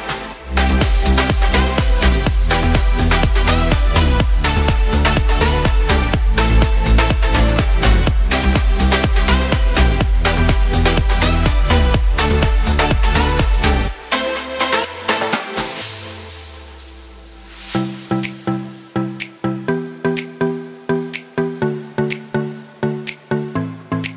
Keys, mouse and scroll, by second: 1.3-2.8 right drag, 8.4 e, 8.7 z, 15.0 g, 15.2 z, 22.9 shift+a.